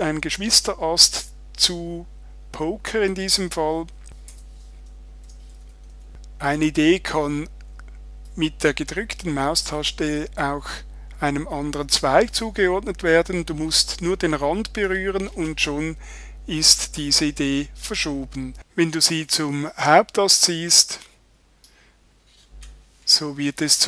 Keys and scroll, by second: 4.3 Return.